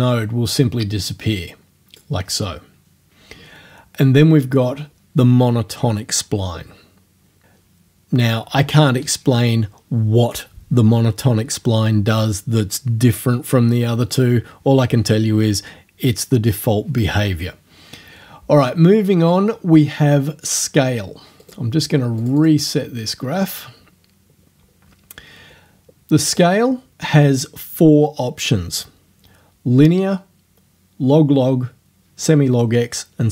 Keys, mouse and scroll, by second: 4.2 scroll down 1, 7.4 click, 21.4 right click, 22.2 click, 26.3 click.